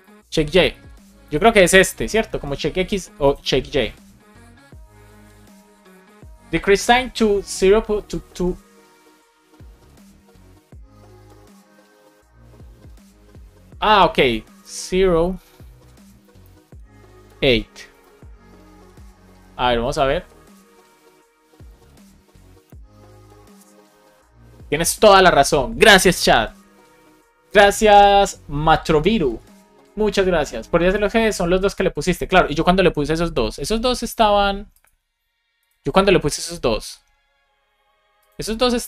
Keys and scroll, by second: 16.0 BackSpace, 17.9 super+s, 22.6 Return.